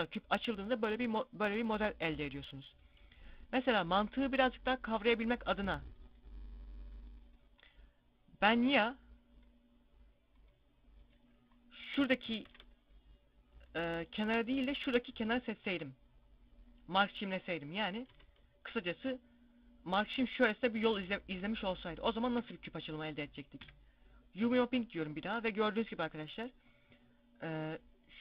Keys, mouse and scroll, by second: 8.4 click, 12.4 ctrl+e, 14.7 right click, 15.6 ctrl+e, 17.9 a, 22.2 a.